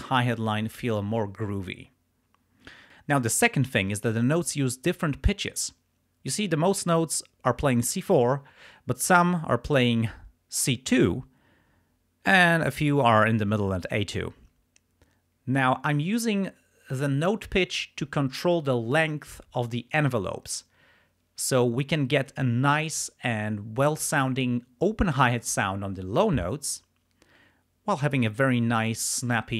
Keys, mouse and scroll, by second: 26.4 click.